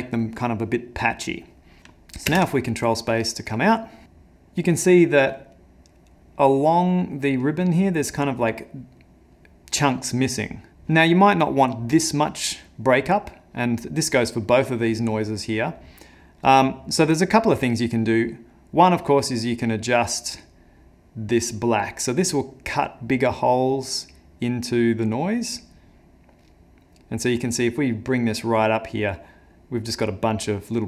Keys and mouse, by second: 2.5 ctrl+space, 10.7 click, 12.0 middle click, 13.0 middle click, 13.7 middle click, 14.1 middle click, 14.5 middle click, 15.1 middle click, 15.7 middle click, 18.9 click.